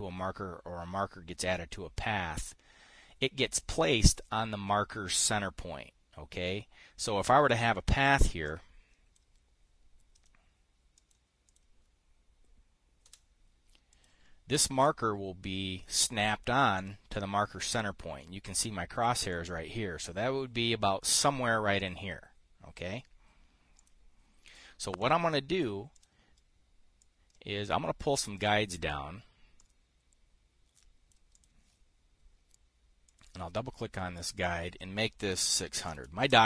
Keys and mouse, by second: 8.5 click, 9.0 click, 11.4 click, 12.0 click, 13.5 Return, 14.4 click, 15.3-17.1 drag, 17.2 click, 19.8-21.6 drag, 22.3 click, 24.3 click, 25.0 Delete, 25.5 click, 26.4 click, 27.5-31.7 drag, 31.8 click, 33.6 click, 34.9 click, 36.0 KP_6, 36.3 KP_0.